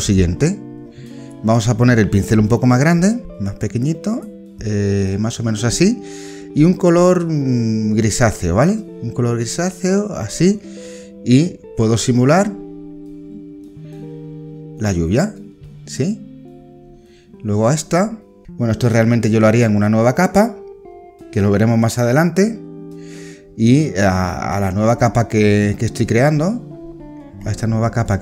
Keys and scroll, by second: 0.0 ctrl+z.